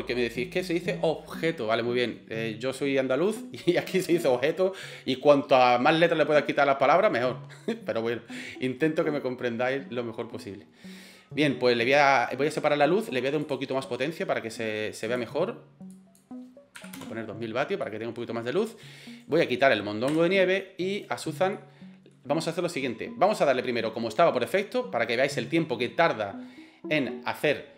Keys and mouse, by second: 15.2-17.3 drag, 17.8-18.2 middle drag, 19.2 right click, 20.1 Delete, 21.0 right click, 21.5-22.2 middle drag.